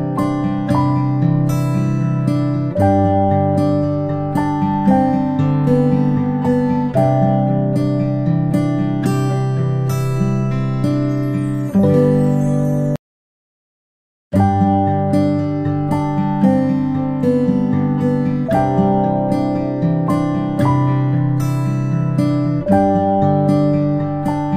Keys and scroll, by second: 15.9-16.3 alt+space, 19.9 space, 20.2 space.